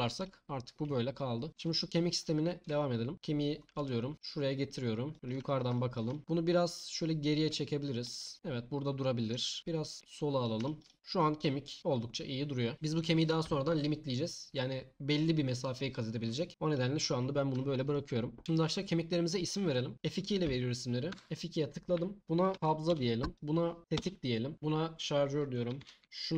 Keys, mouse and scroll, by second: 1.9 click, 2.7 Tab, 3.8 t, 4.1 t, 6.8 click, 17.9-19.9 middle drag, 21.1 F2, 23.3 click, 23.8 F2.